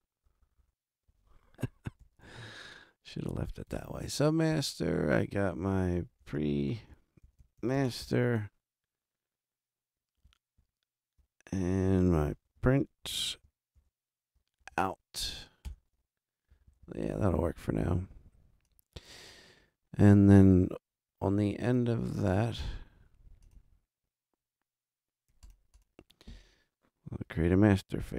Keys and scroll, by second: 0.2 BackSpace, 1.8-2.7 typing, 4.5 super+Down, 6.0-8.5 typing, 10.6 super+Down, 12.1-15.2 typing, 15.6 Return, 16.5 Right.